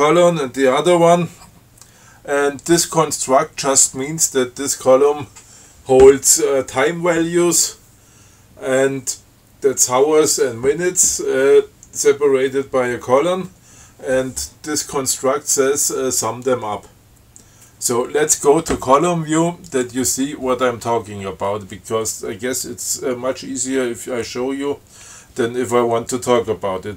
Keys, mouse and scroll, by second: 18.7 scroll up 2, 20.0 click.